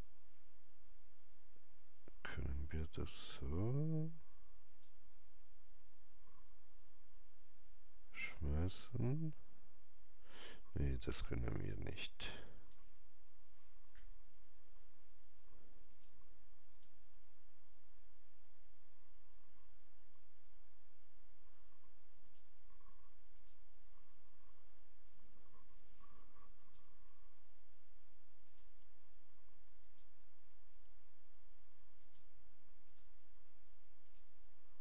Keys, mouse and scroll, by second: 2.0-7.2 drag, 2.0 scroll up 1, 12.5-15.2 drag, 15.8 click, 16.6 click, 22.2 click, 26.5 click.